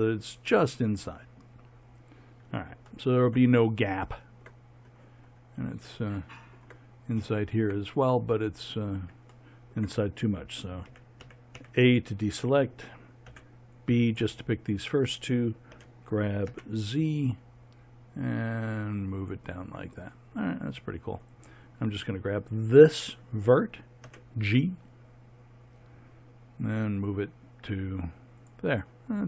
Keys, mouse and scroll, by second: 10.9 a, 11.2 a, 11.5 a, 13.3 b, 15.7 g, 21.2-23.2 right drag, 24.0 g.